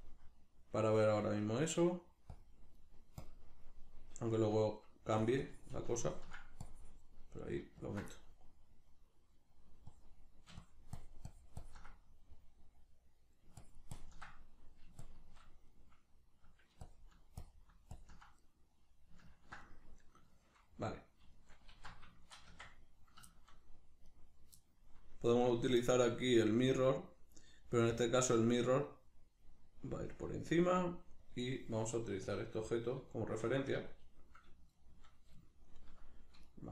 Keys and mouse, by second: 1.4 middle click, 2.3 click, 2.8 middle click, 3.2 click, 3.7-5.2 middle drag, 5.2-8.1 ctrl+drag, 8.1-9.9 middle drag, 9.9-11.9 drag, 11.9-13.6 middle drag, 13.6 ctrl+click, 14.3 middle click, 15.1 shift+click, 15.7-16.9 middle drag, 16.9-18.4 ctrl+drag, 18.4-24.1 middle drag, 21.7 alt+q, 22.5 Tab, 24.1 right click, 24.6-25.4 shift+middle drag, 25.4 right click, 26.7-33.1 drag, 33.1-36.5 shift+middle drag, 33.6 a, 36.5 right click.